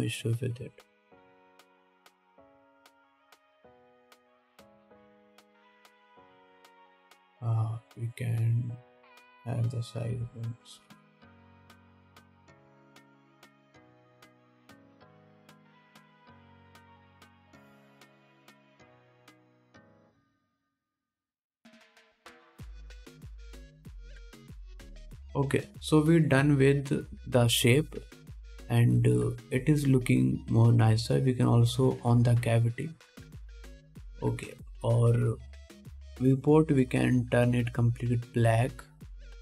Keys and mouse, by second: 1.5 ctrl+s, 1.5-4.2 drag, 4.2 middle click, 4.3-8.8 drag, 5.8 s, 8.8-12.7 middle drag, 11.4 s, 12.7-21.1 drag, 13.3 KP_1, 14.1 s, 17.1 g, 19.0 g, 21.1 middle click, 21.1-39.4 drag, 32.0-39.4 middle drag, 32.0-39.4 right drag.